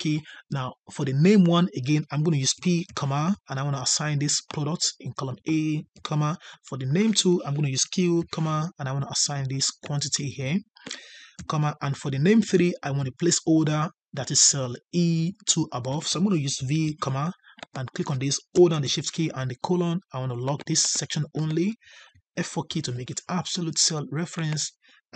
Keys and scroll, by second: 22.6 F4.